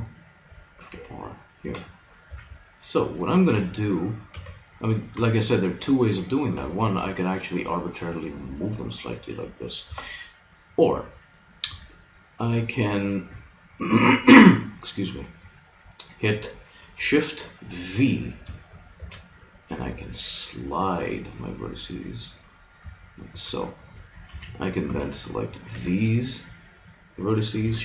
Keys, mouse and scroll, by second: 0.9 ctrl+r, 2.3 a, 3.6 b, 4.4 b, 5.3-6.7 drag, 6.5 g, 6.7 middle click, 19.1 shift+v, 24.3 a, 24.9 b, 25.7 b.